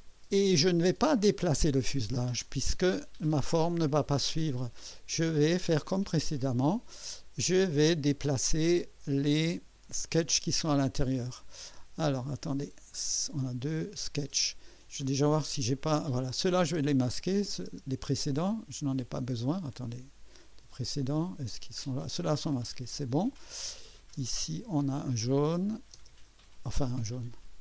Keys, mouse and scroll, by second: 4.3-5.7 drag, 5.7 right click, 8.8 click, 9.8 click, 10.9 scroll down 2, 13.4 click, 15.5 click, 16.3 click, 16.7 space, 17.2 click, 17.7 space, 19.6 click, 20.0 typing, 20.5 click, 21.7 scroll down 1, 22.7 click, 23.8 click, 24.1 typing, 25.5 click, 26.0 space, 27.2 click.